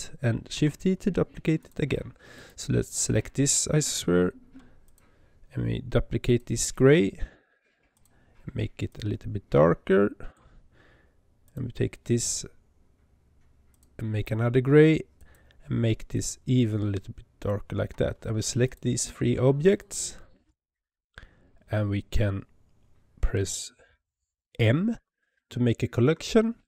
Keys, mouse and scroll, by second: 0.4 shift+d, 2.2 click, 4.8 click, 6.1-7.9 drag, 11.3 click, 13.6-15.2 drag, 18.5 shift+click, 19.5 shift+click, 24.8 m.